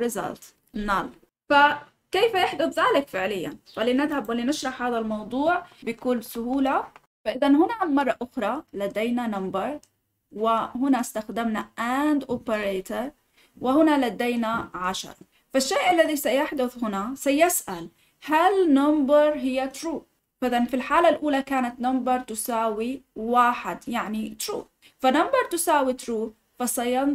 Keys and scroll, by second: 5.6 ctrl+z.